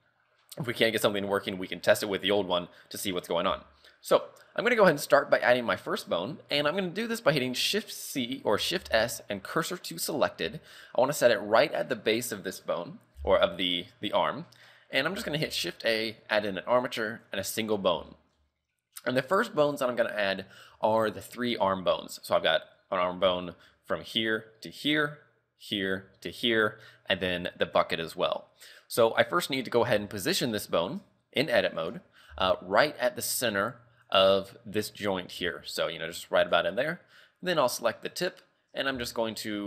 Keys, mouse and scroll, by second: 6.7 middle click, 8.8 shift+s, 10.5 KP_3, 15.5 shift+a, 17.6 scroll up 3, 18.1 shift+middle click, 18.6-20.3 scroll down 3, 20.3-20.8 scroll up 1, 23.4 shift+middle click, 28.3 shift+middle click, 28.8 scroll up 6, 29.2 shift+middle click, 29.6-29.9 scroll up 2, 29.9 g, 31.1 Tab, 31.9 right click, 32.4 g, 35.4 g, 36.7-37.1 scroll down 4, 37.7 right click, 38.0 scroll down 2, 38.3 shift+middle click, 39.1 shift+middle click.